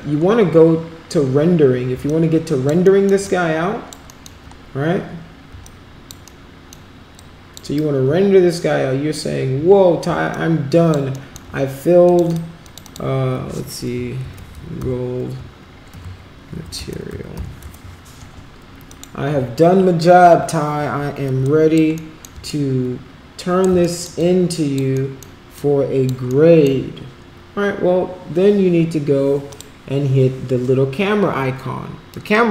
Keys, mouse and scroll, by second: 2.1 alt+click, 2.9 alt+middle click, 3.2 alt+click, 4.2 alt+middle click, 5.6 alt+click, 6.3 alt+middle click, 7.2 alt+click, 10.3 alt+click, 11.1 alt+middle click, 12.1 click, 12.3 click, 12.7 click, 12.8 click, 14.3 shift+g, 15.9-17.4 typing, 17.7 Return, 18.9 click, 21.4 alt+click, 22.1 alt+middle click, 22.7 shift+right click, 23.8 alt+middle click, 24.2 alt+click, 25.0 alt+right click, 25.5 alt+click, 26.4 alt+right click, 29.5 click.